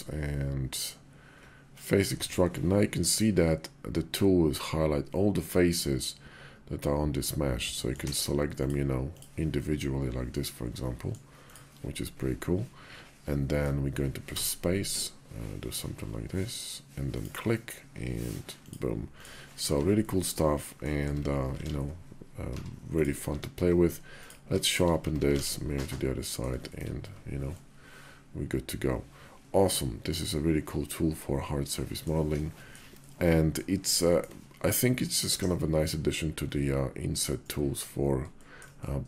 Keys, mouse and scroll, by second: 3.9-8.3 drag, 8.3-10.2 shift+middle drag, 10.2-11.1 drag, 11.1 shift+middle click, 11.5-14.0 drag, 18.4 click, 19.4 shift+2, 19.8-20.7 drag, 20.8 Tab, 21.4 alt+x, 22.3 Tab, 23.1 q, 24.5 shift+drag, 24.8 Tab, 25.2 alt+x, 25.6 click, 26.5 shift+click, 26.9 Tab, 27.4-27.9 drag, 27.9-31.9 middle drag, 32.3 shift+drag, 32.7 middle click, 32.9-33.3 drag, 33.8 shift+drag, 34.6-37.7 drag, 38.1 shift+click, 38.6 click, 38.8 middle click.